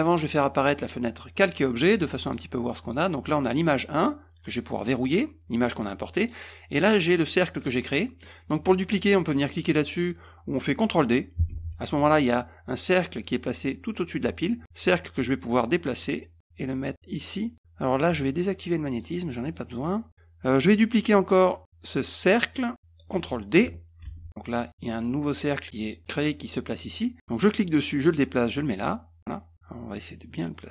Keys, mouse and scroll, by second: 0.1 click, 0.8 click, 2.0 click, 2.8 click, 4.8 click, 6.2 click, 7.9 middle click, 11.5 ctrl+d, 16.0-17.5 drag, 18.9 click, 19.6 middle click, 21.4 click, 24.0 ctrl+d, 27.5-29.2 drag, 30.5 click.